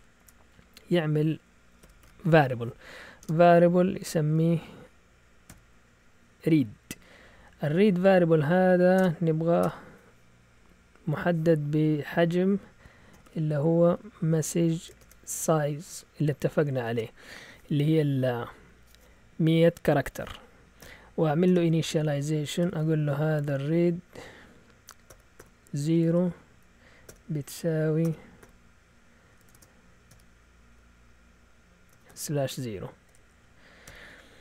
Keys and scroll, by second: 0.1 Return, 1.5-5.4 typing, 8.9-9.6 typing, 12.8-17.3 typing, 21.4 Return, 21.4-23.4 typing, 25.0-30.0 typing, 31.7-34.3 typing.